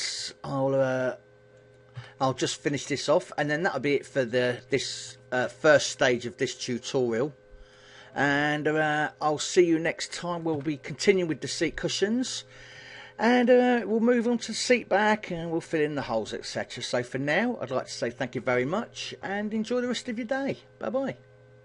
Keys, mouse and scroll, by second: 1.3 click, 1.6 a, 2.0 shift+middle click, 3.2 shift+middle click, 4.6 b, 8.2 g, 10.0 click, 10.2 a, 10.5-11.3 scroll down 7, 11.4 middle click, 12.5 shift+middle click, 13.6 middle click.